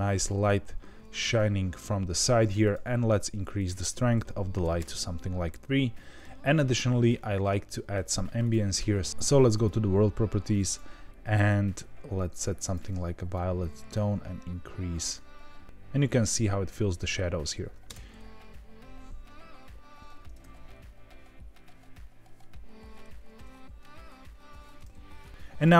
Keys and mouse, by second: 3.5-5.3 drag, 8.4 click, 10.6 click, 17.8 space.